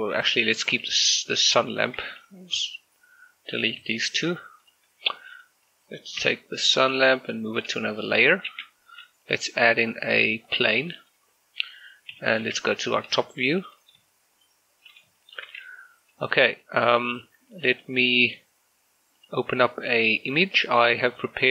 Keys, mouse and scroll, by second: 0.3 ctrl+z, 1.2 shift+right click, 2.6 Delete, 4.7 click, 5.4 right click, 6.3 m, 7.2 click, 8.6 shift+a, 10.6 click, 13.1 scroll up 1, 13.4 shift+middle click, 13.8 scroll up 1, 14.5 shift+middle click, 14.6 shift+scroll up 1, 15.2 shift+middle click, 16.6-17.8 scroll down 1, 17.8 click.